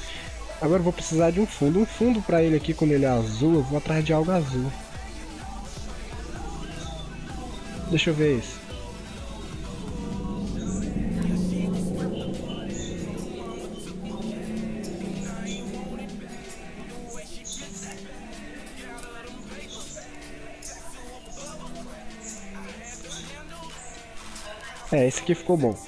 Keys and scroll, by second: 13.6 ctrl+0, 13.8 ctrl+-, 25.4 ctrl+0.